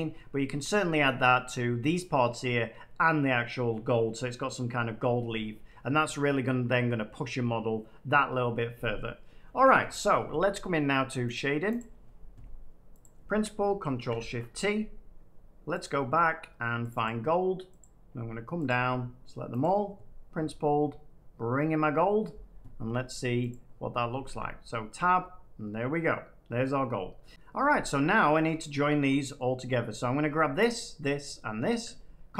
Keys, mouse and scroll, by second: 0.9 middle click, 11.3-12.6 drag, 12.9-14.5 drag, 14.0 ctrl+shift+t, 15.7 click, 17.7 click, 18.6 shift+click, 19.5 click, 23.4 click, 24.2 Tab, 26.5 middle click, 27.0-27.3 scroll down 3, 29.3 middle click, 30.6 shift+click.